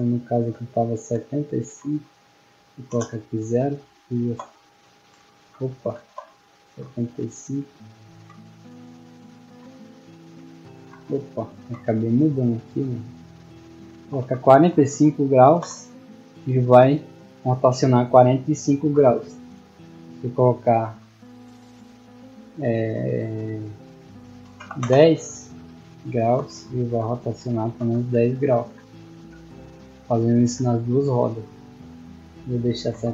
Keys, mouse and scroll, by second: 2.1 click, 4.3-7.7 typing, 12.6 click, 15.8 a, 17.5 d, 26.3-29.0 typing.